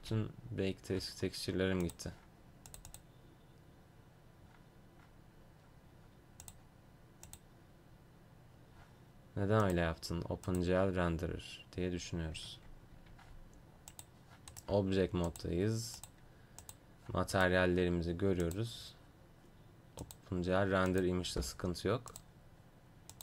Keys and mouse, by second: 0.0 Escape, 12.5 Tab, 13.0 Tab, 14.0-16.3 drag, 14.6-16.3 right drag, 16.5-20.2 drag, 17.4-20.2 right drag, 21.3 Escape.